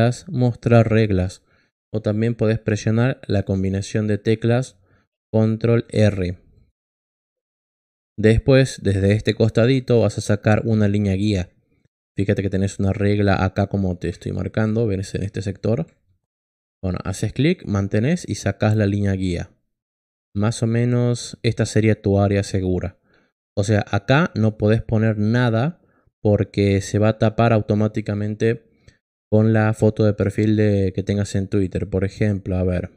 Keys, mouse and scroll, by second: 6.5 click, 17.0-22.3 drag, 32.0 click.